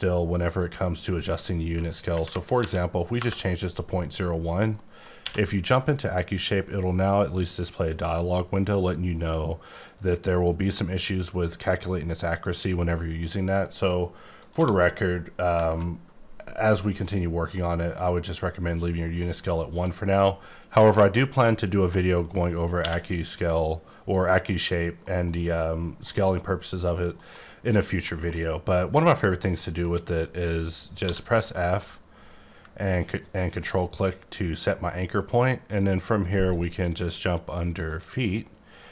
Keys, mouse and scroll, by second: 0.4 click, 2.1 KP_Decimal, 2.3 KP_0, 2.6 KP_1, 3.2 KP_Enter, 4.7 middle click, 5.2 q, 5.7 click, 13.2 right click, 14.4 click, 14.6 1, 15.5 KP_Enter, 16.6 middle click, 18.7 middle click, 19.5 middle click, 19.9-21.2 scroll down 1, 21.8 middle click, 22.7 q, 23.5 click, 25.0 middle click, 26.0 middle click, 27.1 middle click, 27.7 scroll down 1, 28.0 middle click, 28.4-28.8 scroll up 1, 28.8 middle click, 29.6 middle click, 31.0 f, 31.5 middle click, 33.1 ctrl+click, 35.8 click, 36.4 click, 37.0 click, 37.8 click.